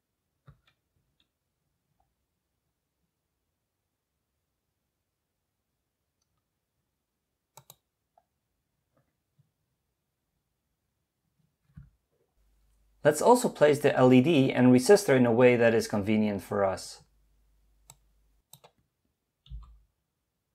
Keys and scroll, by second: 1.1-1.8 typing, 19.5 typing.